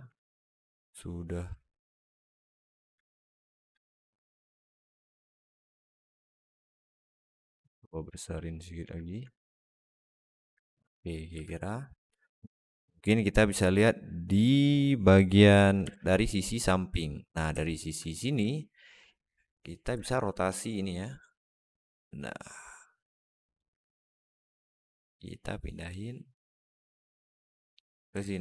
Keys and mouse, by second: 0.0-2.7 alt+middle drag, 5.7-6.5 alt+middle drag, 6.9 Tab, 7.1 s, 8.1-8.7 alt+middle drag, 9.2-10.3 alt+middle drag, 10.5 Tab, 10.9 alt+middle click, 11.2 alt+z, 12.5 KP_Decimal, 15.7 KP_3, 17.5 alt+shift+middle click, 18.3 alt+shift+middle click, 19.8 r, 24.2-25.7 drag, 26.4-27.7 drag, 28.0 alt+middle click.